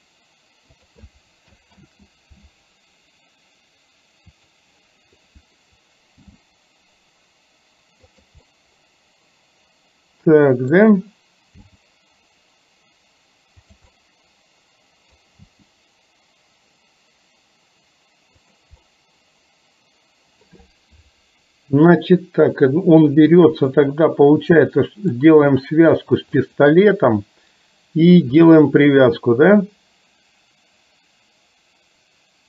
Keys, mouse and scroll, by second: 1.9 ctrl+z, 4.5 click, 6.4 g, 8.5-10.8 middle drag, 11.7 g, 14.0-15.2 middle drag, 15.2 scroll down 1, 15.4 g, 18.9-20.5 middle drag, 23.4-25.3 middle drag, 26.5 shift+click, 28.5 click.